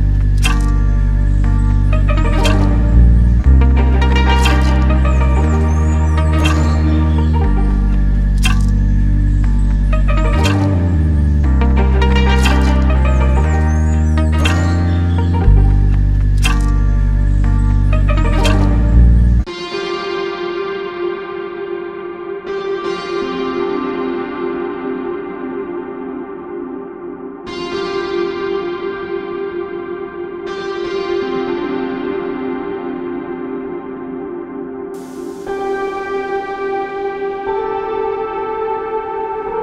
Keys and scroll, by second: 25.4 Escape, 29.0 Escape, 31.1 7, 33.9 Caps_Lock, 34.6 Page_Down, 34.7 7, 35.9 Escape, 37.4 7.